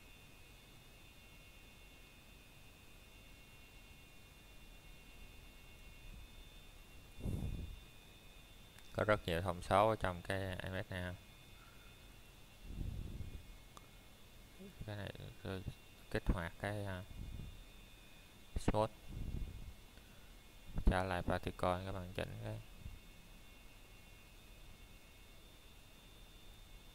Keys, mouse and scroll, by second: 13.2-15.5 scroll up 1, 17.3 click.